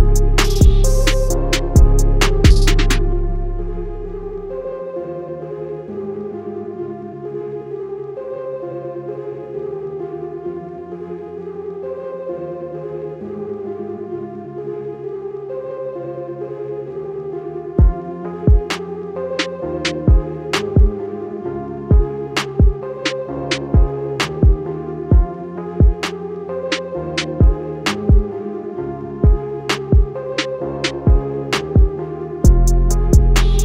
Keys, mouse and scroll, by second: 3.1 alt+scroll down 2, 4.1 click, 9.5 Escape, 9.6 click, 10.2-10.7 alt+scroll up 2, 11.0 click, 15.7 click, 16.7 scroll down 1, 17.5 scroll up 1, 18.0 click, 19.1 scroll down 1, 20.1 click, 21.6 scroll up 1, 22.0 scroll down 1, 22.6 click, 26.1 scroll up 1, 27.4 click, 28.0 Up, 28.3 click, 29.1 scroll up 1, 29.8 click, 30.4 Right, 31.2 click, 31.8 scroll down 1, 32.1 click, 33.0 scroll up 1, 33.5 click.